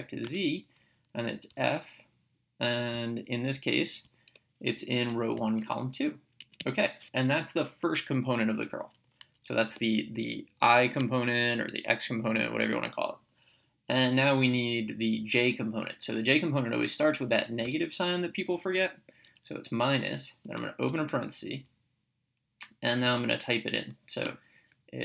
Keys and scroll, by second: 0.3 Tab, 1.5 f, 4.1 (, 5.1 1, 5.4 ,, 6.4 Right, 11.0 ,, 17.7 -, 20.9 (.